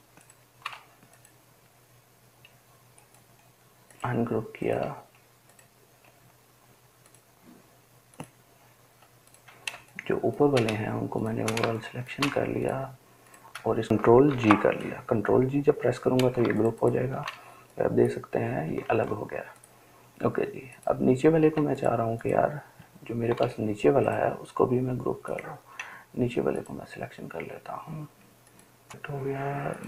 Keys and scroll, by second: 14.6 ctrl+g, 19.2 ctrl+z, 21.9 ctrl+space, 22.5 ctrl+space.